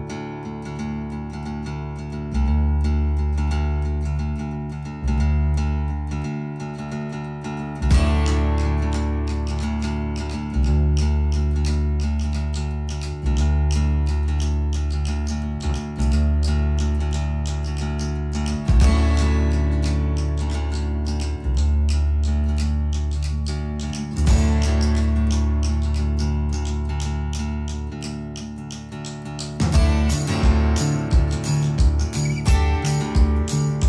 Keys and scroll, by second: 1.6 alt+q, 8.0 Caps_Lock, 9.4 Delete, 12.4 ctrl+z, 14.0 Escape, 14.8 Escape, 31.2 space.